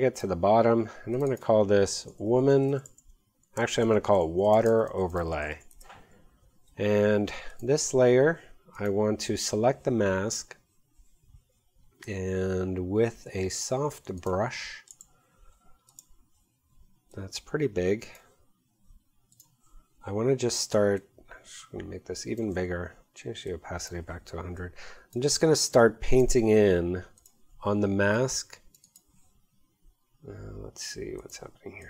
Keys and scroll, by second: 2.1-6.0 typing, 3.6 super+n, 3.7 super+a, 4.0 super+w, 25.6 x.